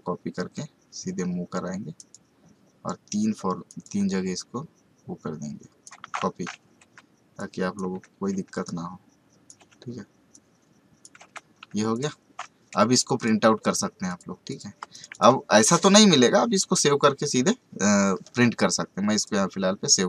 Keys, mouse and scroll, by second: 6.8 Up, 7.4 click, 7.9 Up, 8.6 click, 9.6 Up, 10.3 click, 11.2 Down, 11.9 click, 14.8 space, 14.9 right click, 15.1 click, 19.1 click.